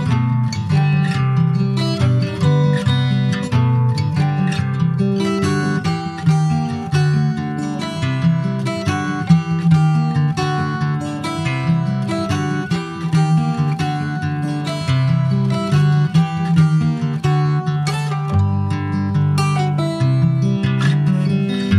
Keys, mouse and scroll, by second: 0.1 click, 0.5-1.6 shift+middle drag, 1.6 3, 1.8 click, 2.8 ctrl+b, 5.1-6.8 middle drag, 6.8 ctrl+z, 7.2 Tab, 7.4 click, 7.7 ctrl+a, 8.8 Tab, 9.8 ctrl+b, 13.9 click, 14.4 middle click, 15.1 i, 16.4-18.1 middle drag, 19.2-20.5 middle drag, 20.5 e.